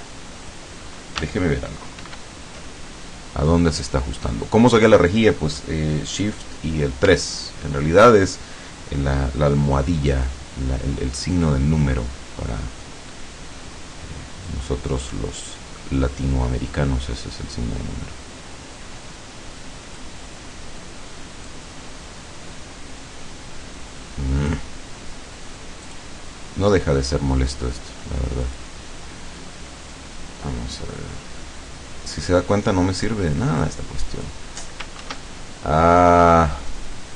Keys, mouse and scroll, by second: 2.0 shift+3, 7.4 ctrl+scroll up 2, 11.4 click, 14.5-20.2 drag, 21.5-24.7 drag, 25.8 click, 28.4 click, 30.0-34.5 drag, 35.0 shift+3, 36.0 middle click.